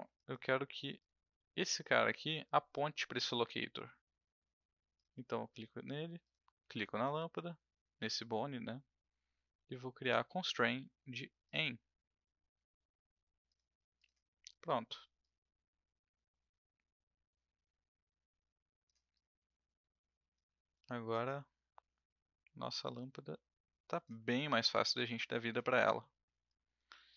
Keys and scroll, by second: 1.8 e, 5.6 w.